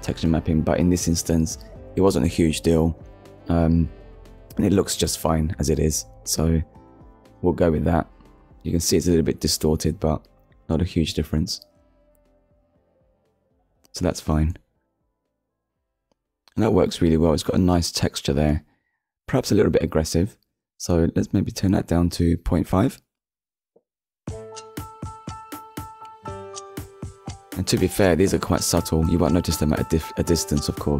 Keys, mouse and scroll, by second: 0.7 click, 1.4 middle click, 3.9 3, 4.3 a, 5.7-6.1 scroll up 1, 7.2 scroll down 1, 7.9-8.3 scroll up 1, 8.8-9.2 scroll up 1, 9.6 scroll down 1, 10.7-11.1 scroll down 1, 12.2 Tab, 13.3 click, 14.6 shift+middle click, 16.1 scroll up 1, 16.7 middle click, 18.0 middle click, 20.4-20.8 scroll down 1, 21.4-21.8 scroll up 1, 22.0 click, 22.8 KP_Decimal, 23.0 KP_5, 23.7 Return, 24.8 middle click, 25.5-25.9 scroll up 1, 26.8 middle click, 28.2 middle click, 29.5-29.8 scroll down 1, 29.8 middle click, 30.6-30.9 scroll down 2.